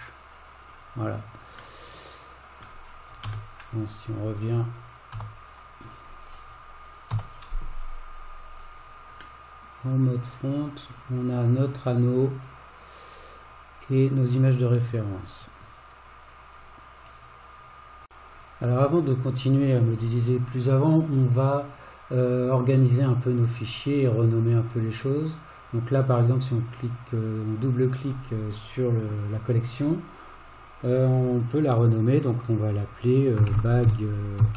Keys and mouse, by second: 1.9-2.7 middle drag, 3.2 KP_1, 5.2 KP_Divide, 9.4-14.9 middle drag, 23.6 click, 24.6-34.5 drag.